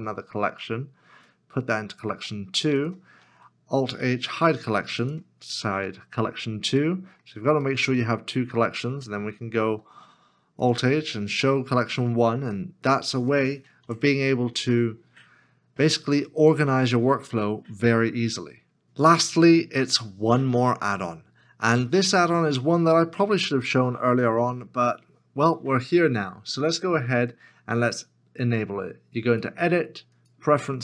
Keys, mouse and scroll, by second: 3.2 ctrl+h, 6.8 middle click, 9.6 ctrl+h, 12.0 middle click, 13.8 alt+h, 23.3 Tab, 24.4 KP_7.